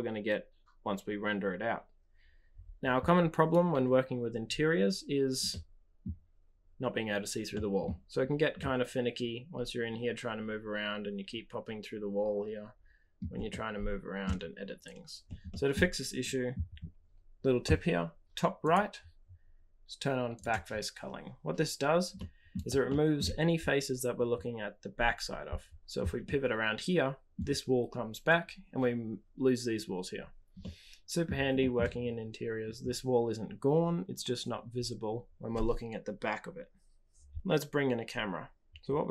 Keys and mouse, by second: 5.4-6.0 middle drag, 7.5-7.8 middle drag, 8.5-13.1 middle drag, 13.4 shift+drag, 13.6-14.2 shift+middle drag, 15.4 shift+middle drag, 18.6-20.9 drag, 22.1-22.5 middle drag, 22.8-23.1 shift+middle drag, 26.2 click, 26.4-27.3 middle drag, 30.6-31.2 middle drag, 31.5 shift+middle drag.